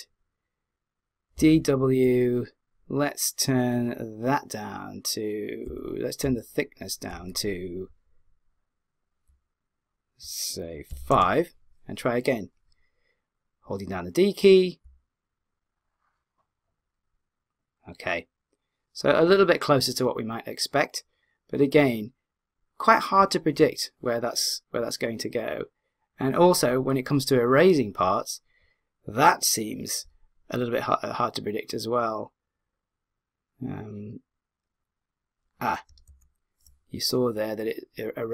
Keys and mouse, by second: 1.3 d, 1.5 w, 5.7 d, 6.2 d, 7.1 d, 7.3 w, 8.3 click, 14.8 d, 15.3 click, 36.1 z.